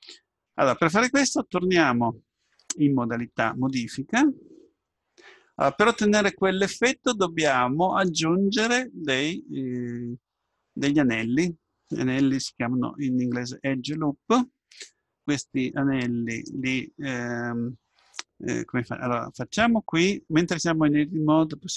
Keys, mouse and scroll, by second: 3.6 Tab, 4.8-6.7 middle drag, 7.4-10.2 middle drag, 10.2-13.4 drag, 10.2-13.4 right drag, 13.4 middle click.